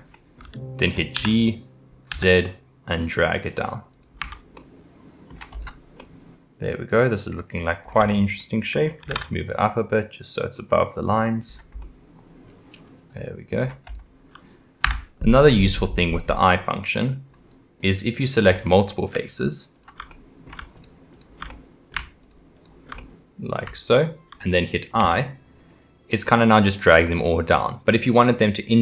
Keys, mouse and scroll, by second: 0.1-1.1 middle drag, 1.1 g, 4.5-5.5 middle drag, 5.5 click, 6.0-7.8 middle drag, 7.8 click, 8.4 middle click, 9.0 g, 11.5-11.8 drag, 11.8-13.9 middle drag, 13.9 click, 14.9 Tab, 16.2 click, 16.7-18.1 middle drag, 18.1 click, 18.5 middle click, 19.2 shift+click, 19.7 shift+click, 20.1 middle click, 20.8 shift+click, 21.1 shift+click, 21.5 middle click, 22.2 shift+click, 22.6 shift+click, 23.0 middle click, 23.9 shift+click, 25.0 i.